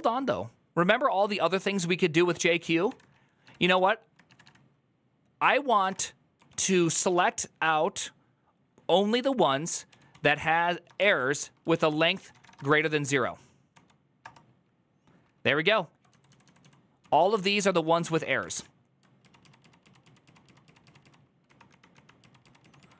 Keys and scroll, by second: 2.7 typing, 4.2 typing, 5.3-7.4 typing, 9.0-14.0 typing, 15.6-18.3 typing, 17.4 ctrl+d, 17.6 ctrl+d, 17.9 ctrl+d, 19.0 ctrl+u, 19.2 ctrl+u, 19.4 ctrl+u, 19.6 ctrl+u, 20.0 ctrl+u, 20.2 ctrl+u, 20.8 ctrl+u, 21.2 ctrl+d, 21.5 ctrl+d, 21.7 ctrl+d, 22.6 ctrl+u.